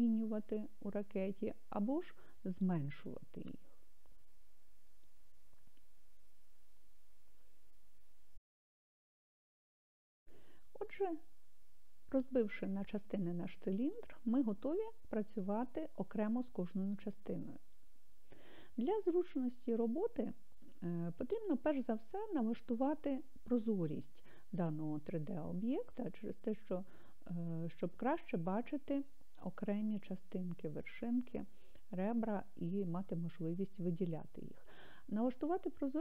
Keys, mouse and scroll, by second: 0.8 click, 2.1 click, 3.1 click, 24.6-29.2 middle drag.